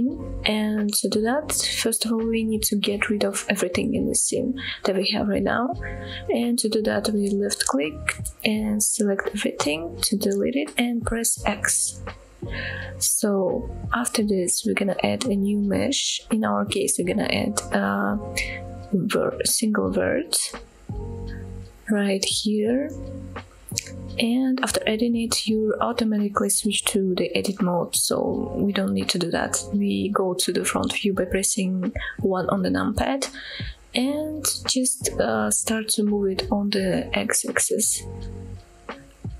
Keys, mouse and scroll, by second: 8.4-9.4 drag, 9.9-10.6 scroll down 2, 10.6-11.1 scroll up 1, 11.1 x, 12.2-12.9 scroll up 3, 12.9-13.3 shift+middle drag, 13.6 middle click, 14.1-15.1 scroll up 2, 15.4 shift+a, 23.5 middle click, 24.2 scroll up 1, 24.6 shift+middle click, 25.2 middle click, 27.9 KP_1, 29.0-30.1 scroll up 6, 30.4-31.4 shift+middle drag, 32.6 scroll down 1, 33.6 KP_1, 36.5-37.8 scroll up 2, 38.1 g, 39.1 x.